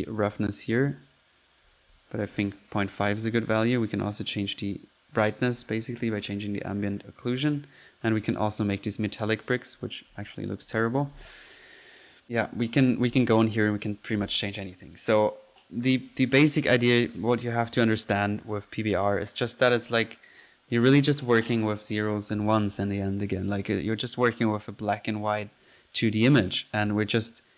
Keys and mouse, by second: 0.1-1.9 drag, 3.4-5.8 ctrl+drag, 6.0 ctrl+z, 6.7-7.1 ctrl+drag, 9.5 click, 9.9 click, 10.8 ctrl+z, 11.6 ctrl+click, 12.3 middle click, 13.8-14.2 drag, 14.7 click, 15.8-17.0 middle drag, 17.0-17.3 drag, 17.4-18.6 drag, 18.7 drag, 19.9 click, 20.2 ctrl+click, 20.6 ctrl+click, 23.0 click, 24.2-25.5 middle drag, 27.2 click, 27.2 right click.